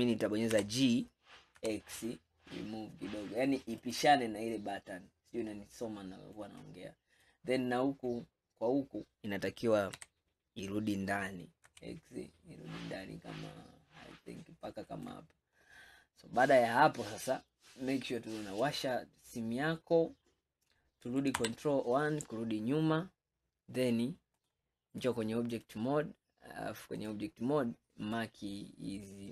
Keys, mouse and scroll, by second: 0.6 g, 6.4 click, 7.8-10.0 scroll up 1, 10.0 g, 15.6-16.3 scroll down 3, 16.6 scroll down 2, 17.2-18.6 scroll down 2, 18.6 click, 19.4 scroll down 2, 20.1 scroll up 2, 21.4 ctrl+KP_1, 21.7 click, 22.6-24.4 scroll down 1, 24.4-25.8 drag, 27.0-28.2 drag.